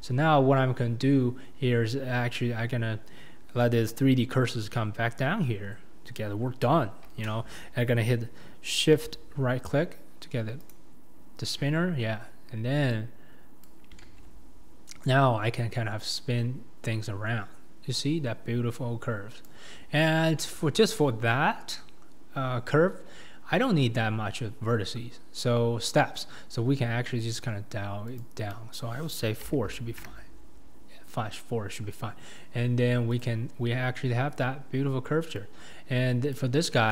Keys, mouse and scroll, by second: 0.4-2.1 scroll down 3, 2.1-9.0 scroll up 11, 10.6-11.8 shift+right drag, 11.8-13.0 scroll up 4, 13.2 click, 14.1 ctrl+z, 15.1 click, 20.4-23.5 shift+middle drag, 30.0-31.3 drag, 33.2-36.3 drag.